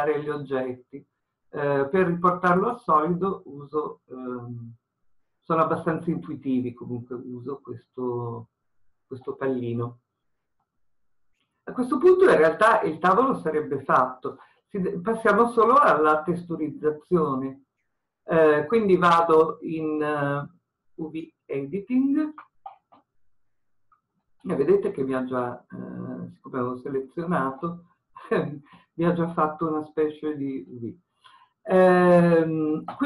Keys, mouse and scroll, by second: 2.6-11.0 drag, 11.0-21.5 middle drag, 14.7 scroll down 1, 21.5-24.0 drag, 24.0-27.6 scroll up 1.